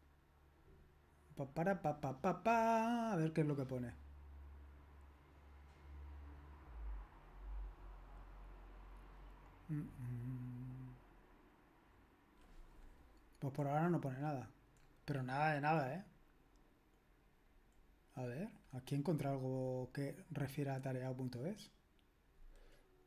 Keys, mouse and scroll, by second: 13.6-16.3 scroll down 1, 16.3-17.3 scroll down 1, 17.3-20.9 scroll down 1, 20.9-23.0 scroll down 1.